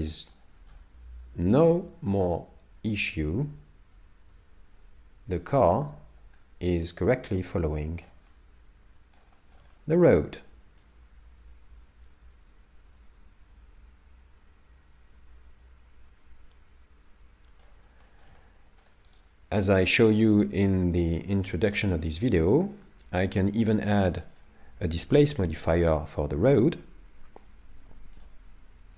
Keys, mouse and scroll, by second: 0.0 scroll down 4, 0.1 shift+middle click, 0.4 shift+middle click, 0.9 scroll down 2, 2.3 click, 8.3 middle click, 9.4 shift+middle click, 9.7 middle click, 10.9 click, 18.0 shift+middle click, 18.4 middle click, 19.2 right click, 21.5 middle click, 24.4 click, 28.8-28.9 scroll down 18.